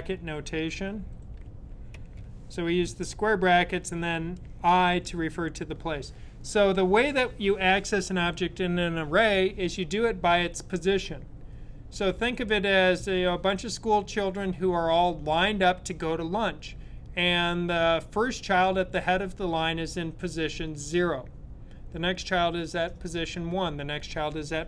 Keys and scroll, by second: 0.9-1.9 typing.